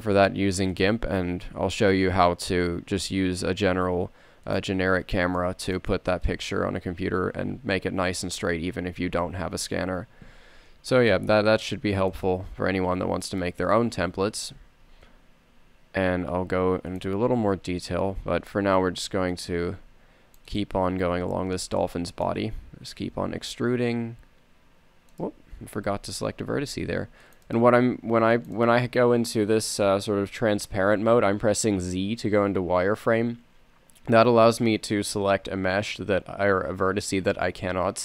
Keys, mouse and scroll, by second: 1.5 s, 5.8-7.7 middle drag, 7.7 a, 10.8 z, 11.5 c, 14.4 z, 15.1 s, 17.5 a, 19.1 z, 19.4 c, 21.2 z, 23.9 e, 26.8 z, 27.2 c, 28.4 c.